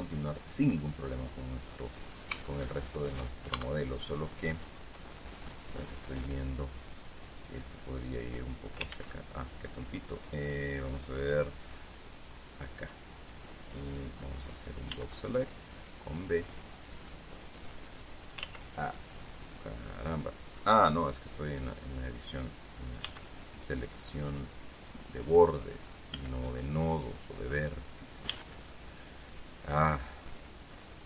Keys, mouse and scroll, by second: 2.6-3.0 scroll up 2, 3.0 shift+middle click, 4.1 shift+Tab, 6.7 right click, 8.4-9.5 drag, 9.5 ctrl+z, 13.2 click, 15.5 b, 16.4-18.0 drag, 19.0 ctrl+z, 22.4 click, 23.6 b, 24.9-26.3 drag, 26.7 b, 27.3 click, 28.8 b, 29.1-30.9 drag.